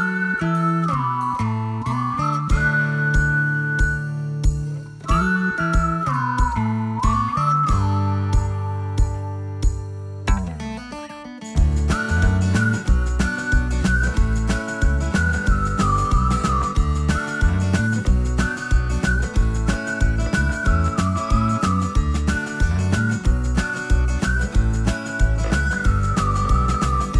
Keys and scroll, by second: 3.8-6.6 typing, 9.5 Escape, 10.5 ctrl+z, 10.9 space, 12.1 o, 13.5 3, 13.7 3, 13.8 3, 15.0 BackSpace, 15.2 BackSpace, 15.7 0, 15.9 0, 16.6 Return, 17.4 space, 19.7 m, 24.1 shift+space, 26.5 p.